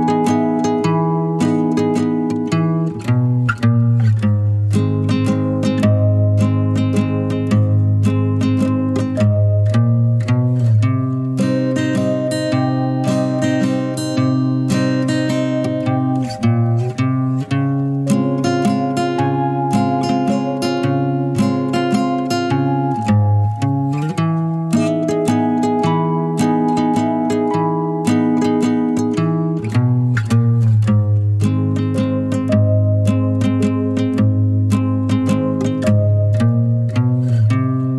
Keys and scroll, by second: 4.2-4.6 typing, 8.7 typing, 22.6-23.0 typing, 30.0 typing, 32.8-33.2 typing.